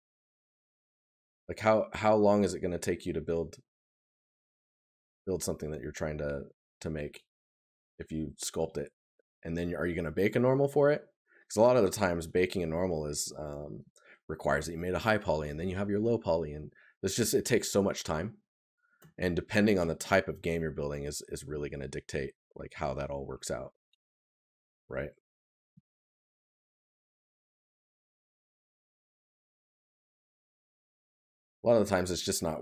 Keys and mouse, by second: 10.3 right click, 25.4 right click, 27.9 right click, 32.2 right click.